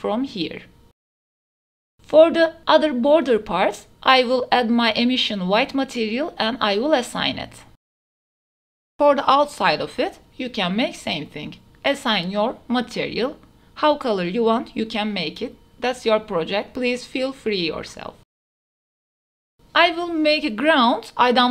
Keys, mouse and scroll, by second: 1.2 Tab, 1.4 3, 1.9 alt+click, 3.4 click, 4.1-4.9 drag, 5.4 Tab, 6.0-6.4 middle drag, 7.5 middle click, 8.3 Tab, 8.9 alt+click, 9.8 KP_Decimal, 11.8 Tab, 12.1-13.2 middle drag, 14.0 shift+click, 14.1 shift+middle click, 14.2 Tab, 14.9 shift+middle click, 15.5 shift+click, 15.7 alt+shift+middle click, 15.9 alt+shift+click, 16.0 middle click, 16.5 shift+click, 16.6 shift+middle click, 16.9 alt+click, 17.1 KP_Decimal, 18.0 shift+click, 18.2 alt+shift+click, 18.6 click, 19.0 Tab, 19.0 click, 19.5 Tab.